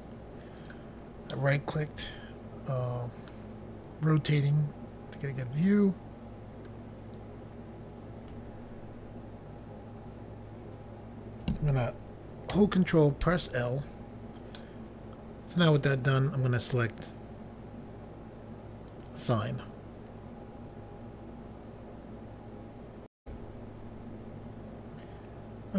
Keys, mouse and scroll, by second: 0.6 right click, 1.4 middle click, 13.3 ctrl+l, 14.6 middle click, 19.0 click, 23.2 Pause.